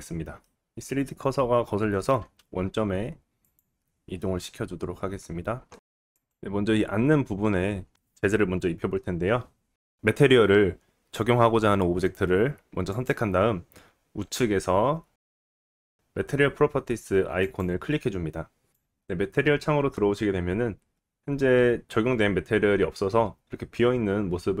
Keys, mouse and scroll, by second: 2.4 shift+s, 5.4 click, 5.9 middle click, 6.1 click, 6.3-12.9 middle drag, 12.9 click, 13.0-17.4 middle drag, 17.4 click, 17.5-18.7 middle drag, 20.9-24.6 middle drag.